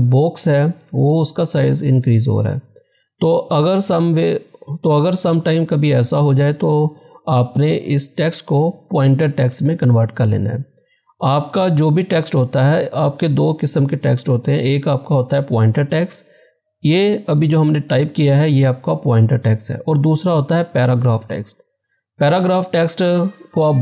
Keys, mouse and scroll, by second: 11.1 click.